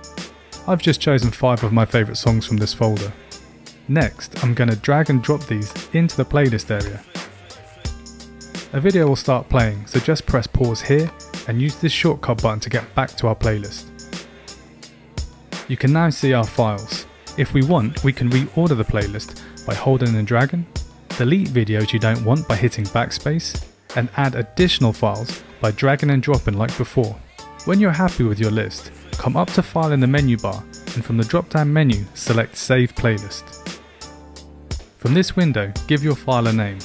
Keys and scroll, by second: 22.2 BackSpace.